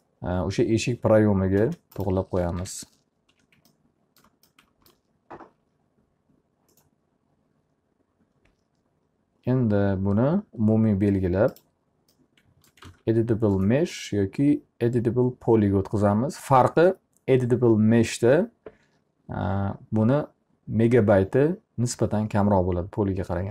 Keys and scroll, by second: 1.6 space, 3.2 p, 3.8 z, 13.0 alt+a.